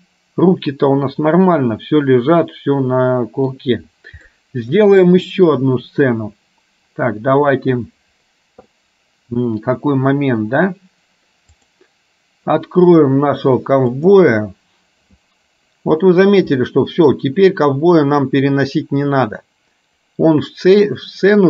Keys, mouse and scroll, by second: 4.5 middle click, 11.7-15.2 drag, 16.6 middle click.